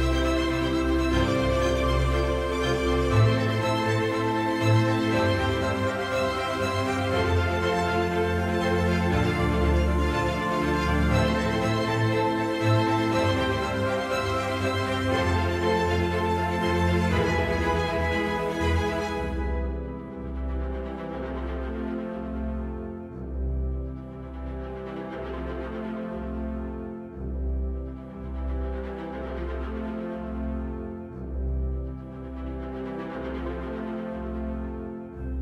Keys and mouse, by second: 2.1-3.8 middle drag, 9.1-11.1 middle drag, 12.0-13.4 right drag, 16.6-22.3 middle drag, 22.9 right click, 24.0 middle click, 25.7 middle click, 26.6-27.8 middle drag, 28.6-29.5 right drag, 29.5 middle click, 30.9 middle click, 32.0 middle click.